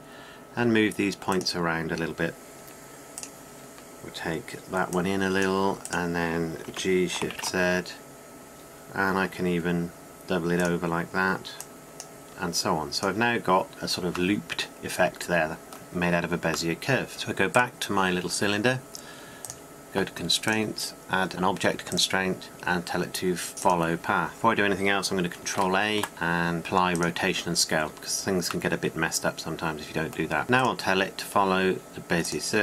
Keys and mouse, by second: 3.9-8.1 drag, 8.1 g, 12.3-13.7 drag, 14.3 Tab, 17.1 click, 17.8 click, 17.9-24.3 drag, 26.4 ctrl+a, 30.4-32.6 drag.